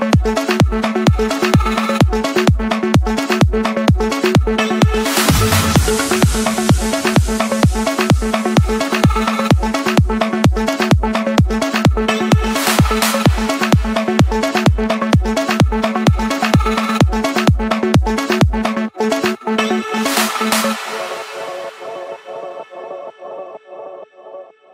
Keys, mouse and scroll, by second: 0.7 click, 1.6 scroll, 2.5 click, 3.2 scroll, 5.4 click, 6.5 click, 11.6-12.7 drag, 12.2 Escape, 13.7-14.8 drag, 15.7 click, 16.0 scroll down 2, 16.1 scroll, 16.5 scroll down 3, 16.8 scroll, 19.6 click, 19.8-20.7 scroll, 21.2 middle click, 24.4-24.7 drag.